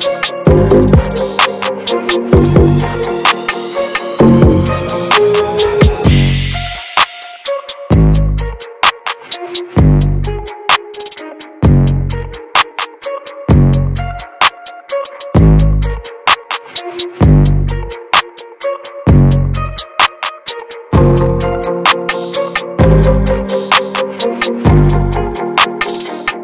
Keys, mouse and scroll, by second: 0.4 middle click, 1.0-2.5 ctrl+drag, 2.5 middle click, 3.0 ctrl+z, 3.4 middle click, 3.6 ctrl+z, 4.1 ctrl+z, 7.2 click, 7.8 middle click, 8.3 click, 9.2 ctrl+z, 10.3-13.9 drag, 13.9 ctrl+z, 14.8-17.4 drag, 17.4 ctrl+z, 18.0-18.3 ctrl+scroll down 1, 18.8-21.2 drag, 21.2-21.8 ctrl+scroll down 2, 22.9-23.2 ctrl+scroll up 1, 23.6-24.8 drag, 24.8 ctrl+z, 25.2-26.3 drag, 26.3 middle click.